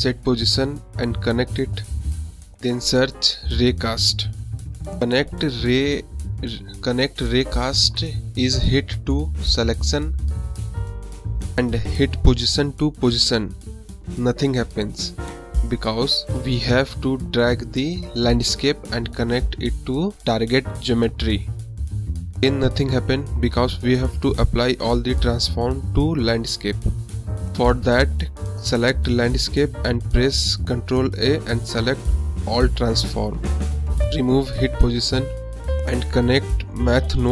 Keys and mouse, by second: 0.7 shift+a, 4.2 click, 5.1 click, 6.8-8.1 drag, 9.2-10.1 drag, 10.6-11.3 drag, 11.3 drag, 14.0 middle click, 14.9-16.2 drag, 16.9 click, 18.7-20.0 drag, 20.7-21.3 middle drag, 22.6 click, 24.1 ctrl+a, 26.0 drag, 27.3-28.3 drag, 28.4-29.0 drag, 29.7 click, 30.0 click, 31.8 click, 33.3 shift+a, 36.3 click, 36.8-37.3 drag.